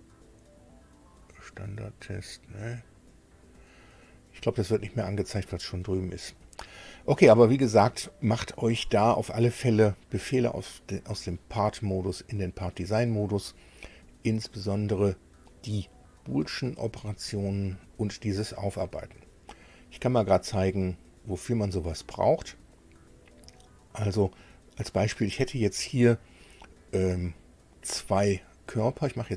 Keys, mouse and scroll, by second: 1.0 click, 2.3 click, 6.4 click, 10.8 click, 18.0 click.